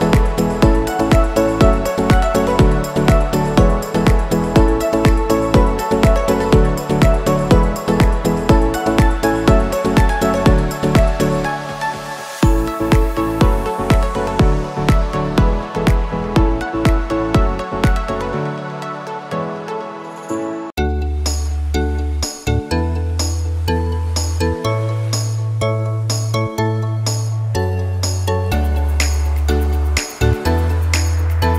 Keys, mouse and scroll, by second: 0.5-7.8 drag, 7.8 right click, 8.9 click, 9.7 right click, 10.7-17.9 drag, 17.9 Return, 18.7 scroll up 1, 20.3 space, 20.4 click, 20.8 space, 21.8 right click, 22.0 ctrl+z, 22.5 right click, 24.1 click.